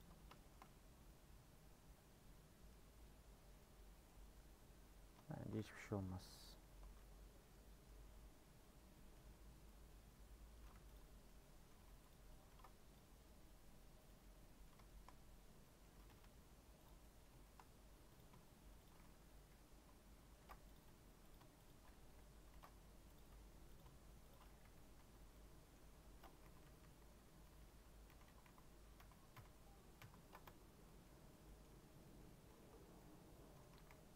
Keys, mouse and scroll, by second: 0.3 shift+middle click, 0.8 scroll up 1, 1.0-5.1 middle drag, 5.1 scroll up 1, 5.3 shift+middle click, 5.5-6.0 scroll down 1, 6.0 middle click, 6.1 2, 6.5 Left, 6.8 1, 7.1 middle click, 7.5 Tab, 7.8 middle click, 8.0 Tab, 8.5 Tab, 8.7 scroll down 3, 8.9 middle click, 9.2 Tab, 9.4 scroll up 1, 9.7 middle click, 10.1 scroll up 1, 10.7 3, 10.9 click, 11.2 scroll up 1, 11.2 middle click, 11.7 1, 12.1 click, 12.5 ctrl+r, 14.2-16.1 middle drag, 16.1 g, 17.0 middle click, 17.6 scroll up 1, 18.1 click, 19.3 j, 20.4 ctrl+r, 21.3 click, 22.0 j, 22.5 ctrl+r, 23.7 click, 24.9 Tab, 25.1 scroll down 2, 25.3 middle click, 25.8 Tab, 26.0 scroll up 2, 26.4 ctrl+z, 26.6 ctrl+z, 26.8 ctrl+z, 27.0-27.5 ctrl+z, 27.6 ctrl+z, 27.8 ctrl+z, 28.1 ctrl+z, 28.2 ctrl+z, 28.4 ctrl+z, 28.9 ctrl+z, 29.3 ctrl+z, 30.0 ctrl+z, 30.4 Tab, 30.8 middle click, 31.2 scroll down 2, 31.4 middle click, 31.8 Tab, 32.0 middle click, 32.3 scroll up 1, 32.6 3, 32.8 scroll down 2, 32.9 middle click, 33.7 a.